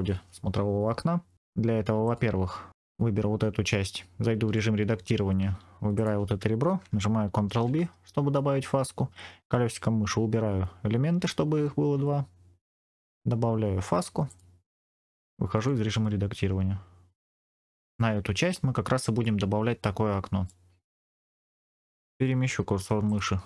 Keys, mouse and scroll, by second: 1.3 middle click, 1.3 Tab, 1.9 click, 2.7 Tab, 2.7 click, 4.4 Tab, 5.7 2, 5.8 click, 7.4 ctrl+b, 9.8-10.3 scroll down 3, 14.2 click, 15.4 Tab, 15.9-18.0 middle drag, 20.4 middle click, 21.9 Tab, 21.9 click, 22.7 3, 22.9 click.